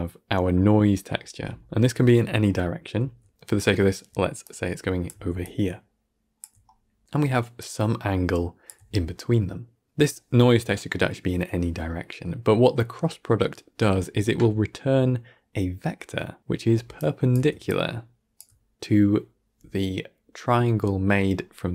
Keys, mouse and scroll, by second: 2.9-3.3 d, 4.3 click, 5.0 d, 5.3-6.3 drag, 6.3-7.4 d, 7.5-8.5 drag, 8.5 d, 8.6 d, 13.7-16.4 middle drag, 16.6 d, 16.9 click, 17.2 d, 17.6 click, 18.3 d.